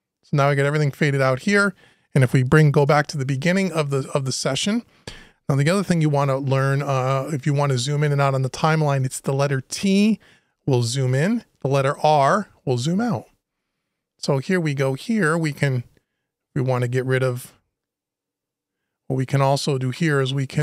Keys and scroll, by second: 2.5 Return.